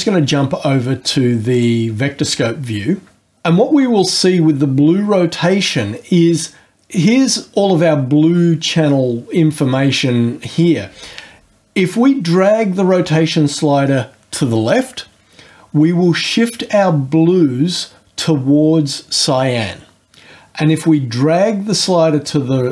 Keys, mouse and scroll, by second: 1.5 click.